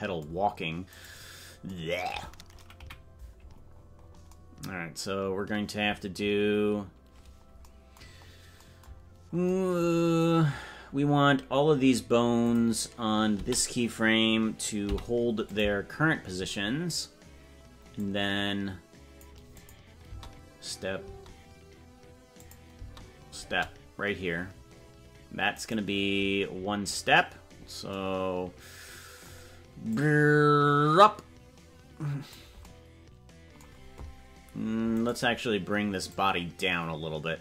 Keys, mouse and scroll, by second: 1.2-1.7 right drag, 2.8 KP_Decimal, 3.5-4.2 scroll down 15, 7.2-7.6 scroll up 5, 8.2-8.6 scroll up 2, 9.1 scroll up 1, 12.4 click, 13.4 a, 18.1 click, 19.7 click, 20.1 space, 22.5 click, 22.8 space, 25.9 right click, 29.9-32.4 drag, 35.3-36.1 right drag, 36.1-37.4 drag.